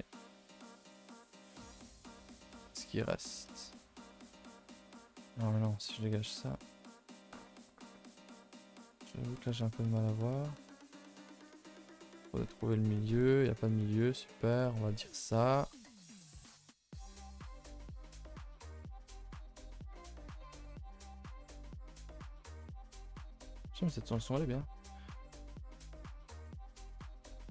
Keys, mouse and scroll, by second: 2.6 middle click, 3.1-3.5 scroll up 4, 3.5 shift+middle click, 4.1 ctrl+z, 4.3-6.1 middle drag, 6.1 KP_0, 11.7 middle click, 12.2-12.6 scroll up 4, 12.6 middle click, 13.4 scroll up 3, 15.7 scroll up 1, 16.6 KP_0, 25.7 middle click, 26.3 z, 26.9 middle click, 27.1-27.5 scroll up 9.